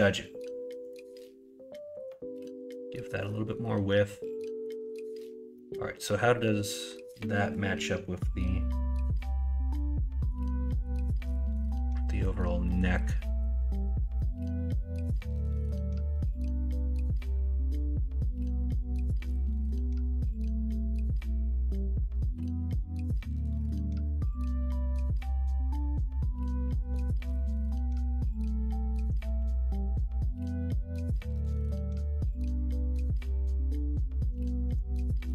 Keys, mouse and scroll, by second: 2.1 middle click, 2.7-4.6 middle drag, 15.7-20.7 middle drag, 27.6 middle click, 28.2 middle click, 28.6 middle click, 29.0 middle click, 29.3 shift+a, 31.5 middle click, 32.1 middle click, 32.5 shift+s.